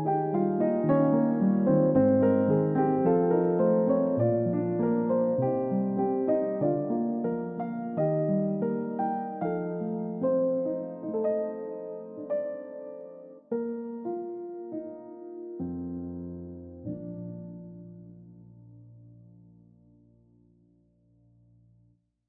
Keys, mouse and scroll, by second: 5.0 scroll up 1, 6.5-6.9 scroll down 1, 11.6 middle click, 13.0 scroll down 1, 16.3-17.3 scroll up 1, 17.3 scroll down 1, 18.1-18.7 scroll up 1, 20.5 scroll up 1, 21.0-21.5 scroll down 1.